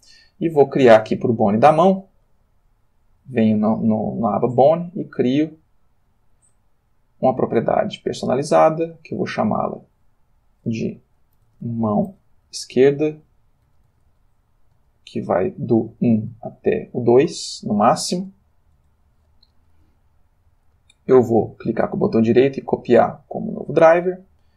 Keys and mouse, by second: 0.9 click, 2.8 click, 4.7 middle click, 6.1 click, 7.6 click, 9.6 click, 10.4 click, 11.4 shift+m, 11.4 shift+a, 11.6 shift+o, 12.1 shift+e, 12.7 Tab, 13.6 1, 13.9 Tab, 14.2 1, 14.8 Tab, 15.9 1, 16.3 Tab, 17.3 2, 18.1 Return, 21.6 middle click, 23.5 click.